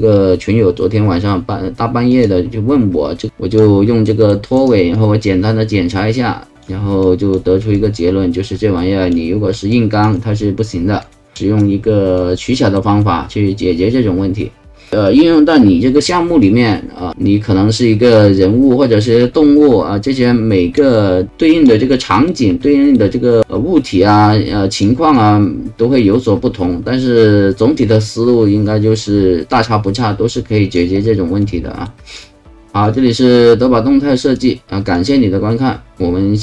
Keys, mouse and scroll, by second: 2.1 click, 3.3 alt+click, 4.0 alt+middle click, 4.9-6.6 alt+drag, 7.0 alt+click, 7.7-9.1 alt+drag, 9.7 alt+click, 11.0 alt+click, 12.2 alt+middle click, 16.0 alt+middle click, 16.4-20.8 alt+drag, 21.3 alt+click, 21.9 alt+right click, 22.6 alt+middle click, 23.4-24.8 alt+drag, 25.1-30.7 alt+drag, 31.4 alt+middle click, 32.9 alt+click, 34.9 alt+click, 36.0 alt+click.